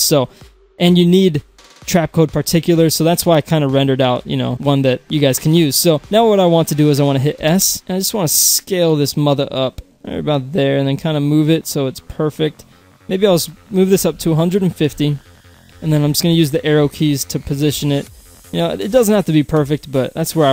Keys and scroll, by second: 7.4 s, 13.8-14.7 typing, 14.7 Return, 15.7 Down, 16.3 Right, 17.4 Up, 17.9 Right.